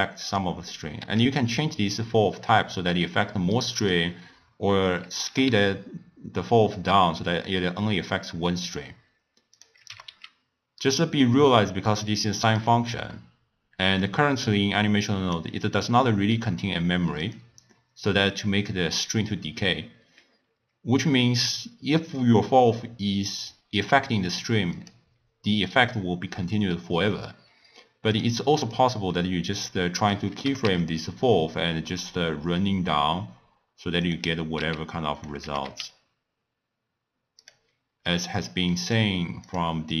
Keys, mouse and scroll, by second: 1.1 s, 5.3 g, 9.9 g, 12.1 click, 13.1-14.8 middle drag, 14.8 click, 16.1-17.2 middle drag, 17.2 click, 24.8 click, 28.1 click, 28.6 click, 30.0 click, 30.5 g, 34.6 s, 35.5 g, 38.5-40.0 drag.